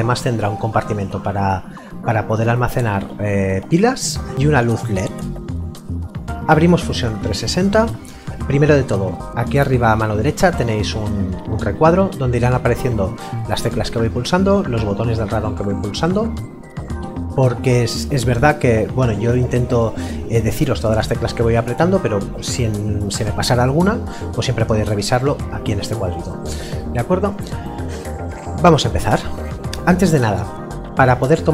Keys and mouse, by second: 3.3 middle click, 6.7 click, 13.4 click.